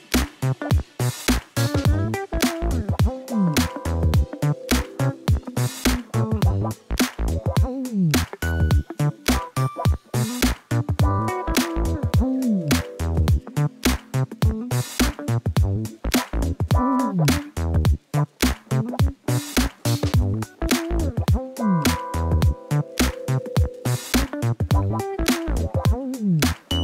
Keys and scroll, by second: 0.3 r, 5.5 g, 7.7 g, 9.3 ., 11.7 g, 13.3 g, 14.5 r, 16.5 g, 17.2 r, 18.7 r, 22.2 ., 23.3 g, 23.8 r, 24.8 r.